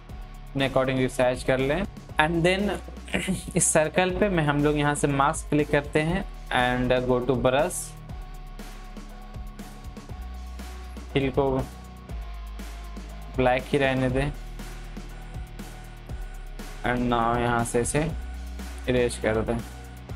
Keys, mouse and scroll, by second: 5.7 click, 5.7-13.2 drag, 15.1-16.7 alt+right drag, 16.7-20.1 drag.